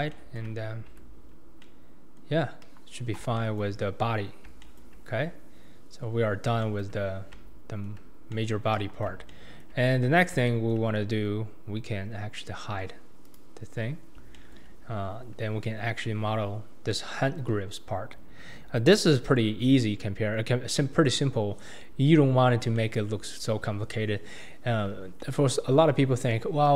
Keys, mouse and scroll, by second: 1.0 Tab, 1.3-1.6 scroll down 3, 1.6-2.6 middle drag, 2.6 KP_1, 3.0-3.4 scroll down 2, 3.4-5.0 shift+middle drag, 5.0-5.4 scroll up 4, 5.4-6.2 scroll down 3, 6.2-6.6 scroll down 2, 6.6-7.1 shift+middle drag, 7.1 scroll up 2, 7.3-8.7 middle drag, 8.7 KP_1, 9.2 scroll up 1, 9.3-9.8 shift+middle drag, 9.8-10.5 scroll up 5, 10.5-13.2 shift+middle drag, 13.2 click, 14.0-14.3 scroll down 2, 14.3-14.9 shift+middle drag, 14.9-15.7 scroll up 2, 22.4-22.8 scroll down 2, 22.8-23.2 shift+middle drag, 23.2-23.9 scroll up 2, 23.9-24.5 scroll up 3, 24.5-25.2 scroll down 2, 25.2-26.3 shift+middle drag, 26.3-26.7 scroll up 2.